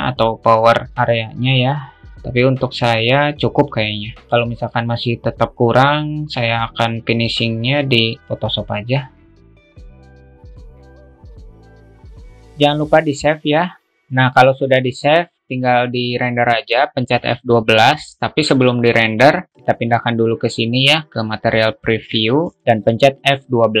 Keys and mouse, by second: 10.2-11.7 drag, 12.1 click.